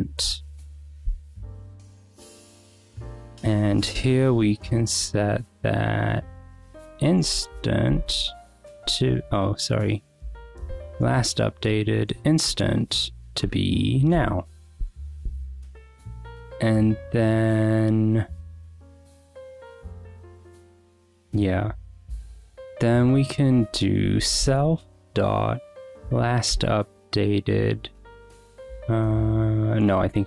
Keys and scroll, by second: 0.3 Escape, 0.9-2.0 typing, 1.1 Escape, 3.6-5.5 typing, 6.9 t, 7.3 a, 8.3 :, 8.8 BackSpace, 10.1-13.1 typing, 10.9 Return, 13.4 Return, 14.1-15.9 typing, 14.8 Escape, 20.4 Return, 23.0 Return, 23.4 Up, 23.7-24.8 typing, 25.9 Return, 26.5 ·, 30.1 Escape.